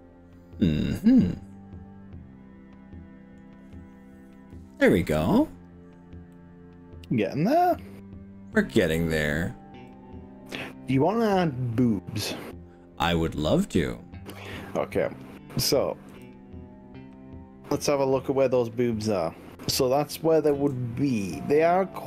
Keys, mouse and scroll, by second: 6.3-9.0 middle drag, 9.2-9.8 scroll down 3, 10.0-15.0 middle drag, 16.2 KP_3, 20.6 KP_1.